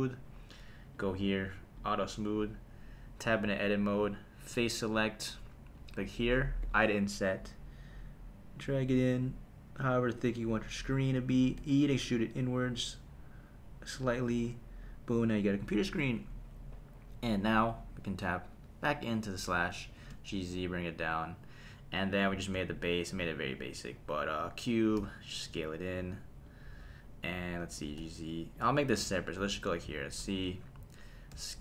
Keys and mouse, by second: 0.9 click, 1.8 click, 3.3 Tab, 4.5 click, 4.9 click, 5.7 click, 6.6 i, 10.5 click, 11.6 e, 13.9 click, 14.3 Tab, 18.5 /, 19.9 g, 20.1 z, 21.2 click, 22.3 shift+a, 25.0 s, 26.5 click, 27.8 g, 28.0 z, 28.6 click, 29.0 /, 31.3 s.